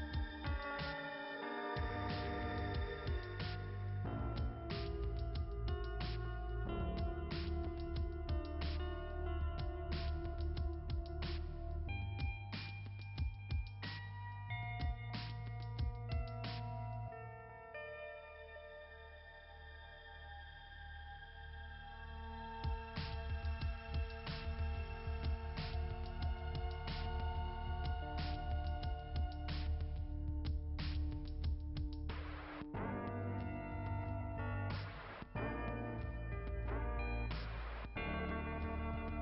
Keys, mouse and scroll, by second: 1.2-1.5 scroll down 2, 2.1 scroll down 1, 2.6-9.5 scroll down 1, 9.5 right click, 9.8 right click, 10.1 right click, 10.4 right click, 10.6 right click, 12.0 click, 13.7 click, 15.0 click, 18.1 right click, 18.4 right click, 20.0 click, 22.4 click, 24.6 click, 36.0 click, 37.7 click, 38.6 click.